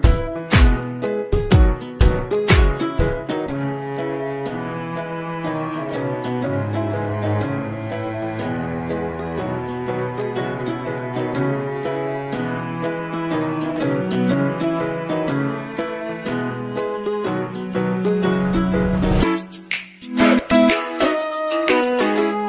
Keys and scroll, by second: 0.3 ctrl+shift+..